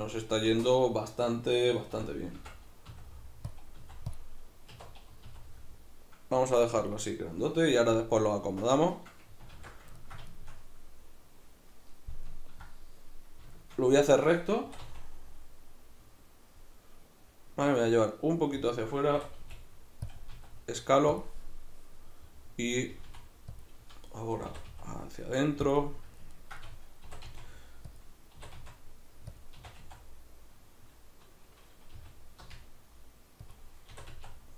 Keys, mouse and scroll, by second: 2.0-5.3 typing, 2.4 Tab, 3.6 click, 4.2 click, 6.9 click, 9.6 alt+q, 10.0-18.7 ctrl+middle drag, 14.6 e, 18.7 click, 19.1 e, 20.1 click, 20.3 s, 21.2 click, 22.9 g, 23.6 click, 24.5 e, 25.8-28.0 middle drag, 27.0 e, 28.0 click, 28.4 e, 29.4 click, 29.6 e, 33.6 click, 33.9 e.